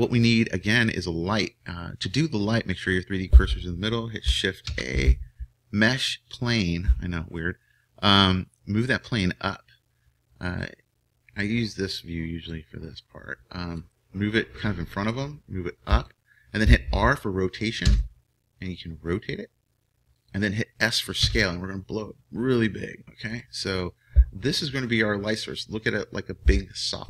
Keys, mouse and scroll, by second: 0.8-2.6 scroll down 1, 2.6-4.6 scroll up 1, 8.0-9.8 drag, 10.0-12.5 middle drag, 12.5-14.4 drag, 15.2-17.8 drag, 17.8 r, 21.2 s.